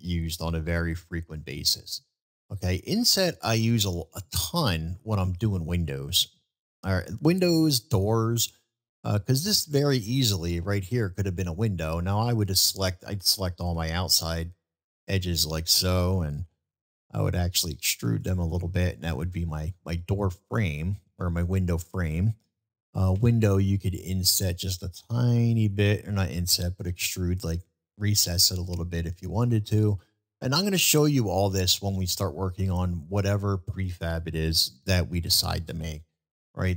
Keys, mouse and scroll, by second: 0.9-1.4 shift+middle drag, 1.7 middle drag, 2.9 middle drag, 3.9-4.2 middle drag, 4.7 middle click, 5.2-6.2 middle drag, 10.0-11.4 middle drag, 14.0 shift+click, 14.9 shift+click, 15.3-15.7 middle drag, 18.6-19.8 middle drag, 20.6-22.1 middle drag, 26.9-27.4 middle drag, 28.2-29.5 middle drag, 30.0 middle drag, 31.0-32.3 middle drag, 33.2-33.7 middle drag, 35.1-35.6 shift+middle drag, 35.9-36.7 shift+middle drag.